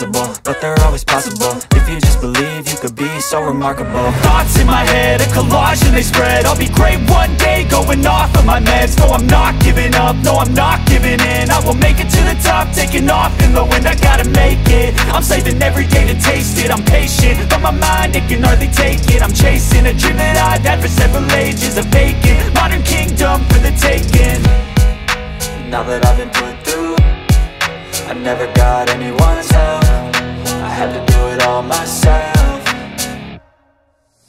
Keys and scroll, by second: 21.9 Escape, 22.4 F2, 26.7 F2, 27.3 ctrl+q, 30.7 space, 31.1 F3, 32.1 alt+w, 32.4 p, 33.5 F2, 33.8 Escape.